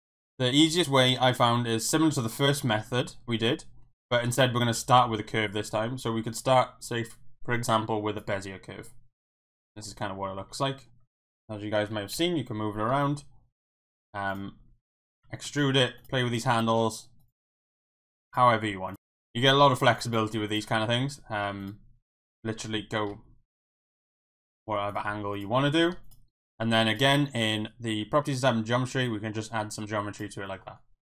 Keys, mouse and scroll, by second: 1.6 shift+middle drag, 2.3 shift+middle click, 4.3 shift+a, 9.3-9.9 middle drag, 9.9 Tab, 10.4 Tab, 12.1 KP_1, 12.9 Tab, 13.8-16.6 typing, 14.3 click, 15.0 click, 15.3 shift+middle click, 15.9 click, 16.5 click, 17.2 click, 18.0 e, 18.6 r, 18.9 click, 18.9 ctrl+z, 19.6 s, 20.0 click, 20.8 s, 21.6 click, 22.6 middle click, 23.1 g, 23.7 click, 23.8 middle click, 24.4 r, 24.9 click, 25.1 g, 25.3 click, 25.6 middle click, 25.9 Tab, 27.1 click, 29.1-30.2 drag, 30.6 middle click.